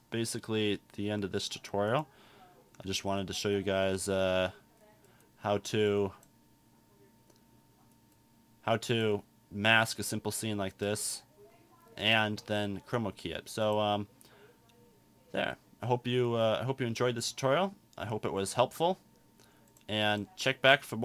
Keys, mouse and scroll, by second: 10.7-13.6 drag.